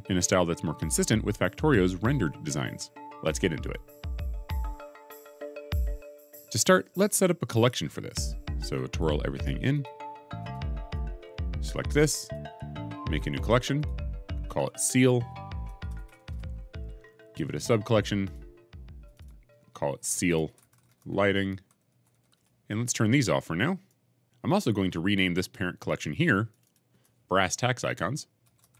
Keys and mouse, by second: 8.8 click, 9.6 click, 10.3 click, 10.8 click, 12.1-13.7 drag, 14.4 click, 14.6 click, 15.2 right click, 15.3 shift+click, 16.2-18.1 middle drag, 18.1 click, 18.2 middle click, 18.9 click, 19.0 middle click, 19.5-22.3 middle drag, 23.7 middle click, 26.3 middle click, 26.6-28.6 middle drag, 28.5 s, 28.6 shift+right click.